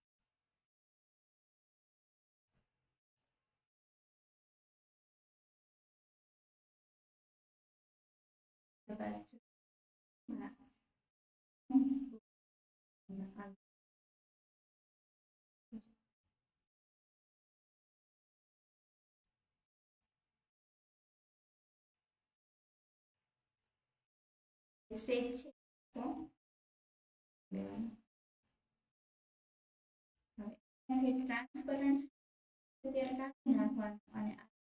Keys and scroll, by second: 1.8 ctrl+shift+z, 26.4 ctrl+z.